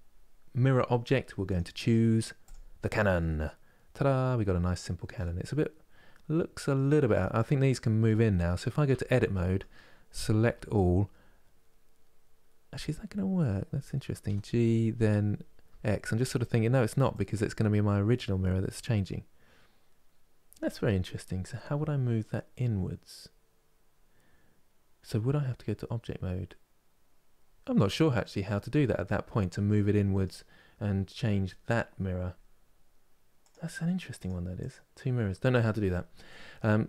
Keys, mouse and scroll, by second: 1.2-2.6 drag, 2.6-6.8 middle drag, 6.8 click, 7.7 middle click, 8.6 Tab, 9.0-10.1 middle drag, 10.1 a, 27.4 middle click, 28.4-28.7 scroll down 3, 28.7-30.8 middle drag, 30.8 scroll down 2, 32.0 scroll up 4, 33.1-35.2 drag, 35.2-36.8 scroll down 1.